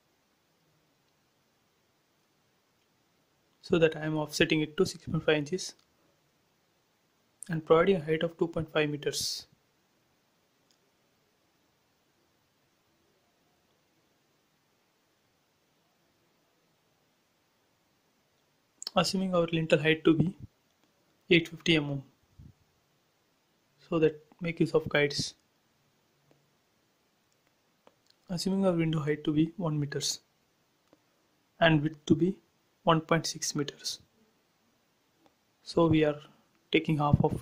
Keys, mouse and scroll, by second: 0.1 click, 1.6-4.0 typing, 2.9 Return, 4.7 click, 6.0 space, 7.2 e, 7.3 click, 7.9 space, 8.8 p, 9.0 click, 10.4-12.7 typing, 12.4 Return, 13.5 ctrl+z, 14.7 p, 15.0 click, 16.1-17.9 typing, 17.5 Return, 18.1 scroll down 1, 18.5 click, 19.1 shift+e, 19.3 space, 19.6 scroll up 1, 20.0-21.5 middle drag, 21.5 scroll up 1, 22.6-24.7 shift+middle drag, 24.7 t, 25.5 click, 26.5-27.9 typing, 28.2 Return, 29.4 click, 30.4-30.7 typing, 31.1 Return, 32.1 click, 33.2 Down, 33.5 Right, 35.3 click, 37.2-37.4 typing.